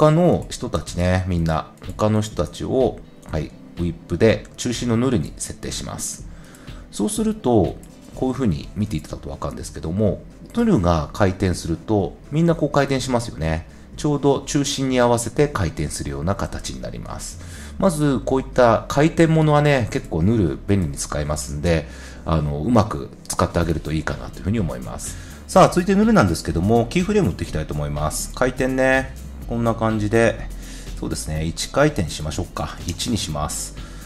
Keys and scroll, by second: 21.0 0, 21.1 Return, 32.8 Return.